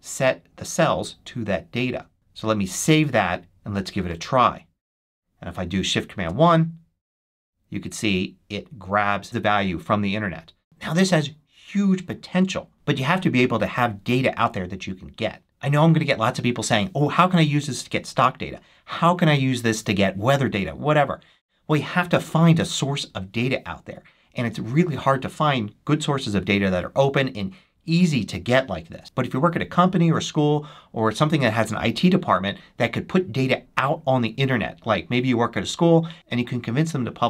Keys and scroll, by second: 2.7 super+s, 6.1 shift+super+1.